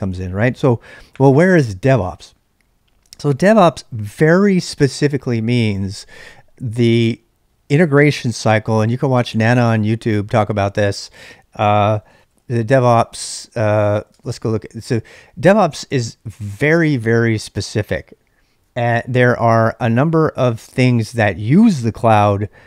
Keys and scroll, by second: 11.6-13.3 typing, 14.1 Return.